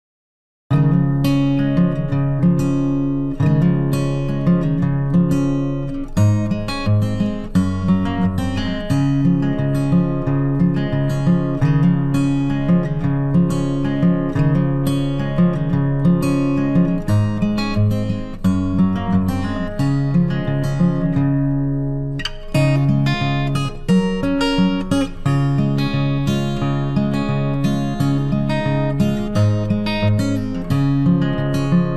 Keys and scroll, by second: 8.9 ctrl+t.